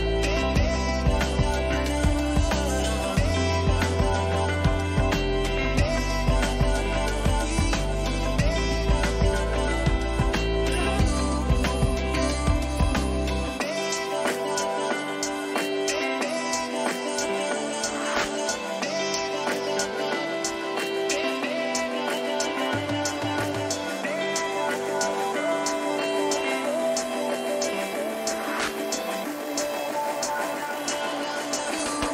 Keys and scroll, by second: 2.0 Return, 5.8 ctrl+t, 24.9 Return.